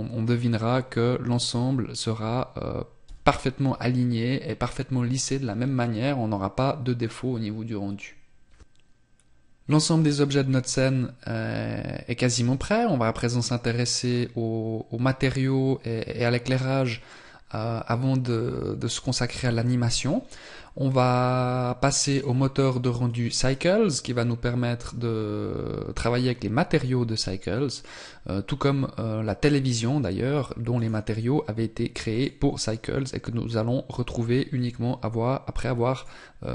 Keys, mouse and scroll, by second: 0.4-2.3 scroll up 4, 3.1 n, 21.9 click, 24.6 scroll down 2, 30.6 right click, 32.0 click, 35.8 click.